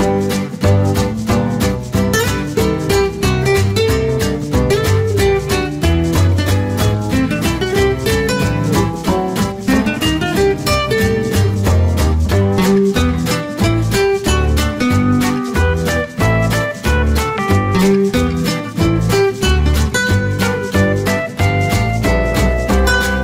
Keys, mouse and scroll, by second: 2.1 KP_1, 2.6 KP_3, 3.1 KP_0, 4.1 click, 16.7 click.